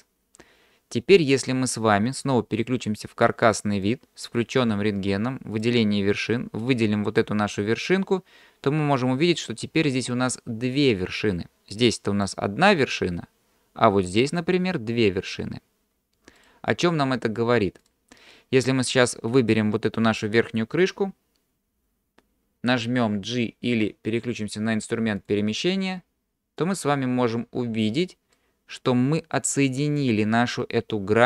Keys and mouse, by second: 3.8 click, 5.6 click, 6.6 click, 12.0 click, 14.3 click, 16.4 click, 17.8 click, 25.3 click, 26.6-27.9 drag, 28.4 middle click.